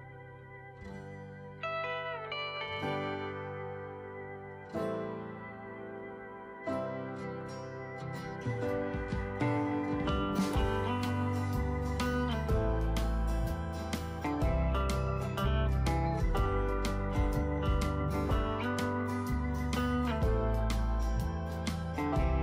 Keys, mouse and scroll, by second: 11.2-22.4 drag.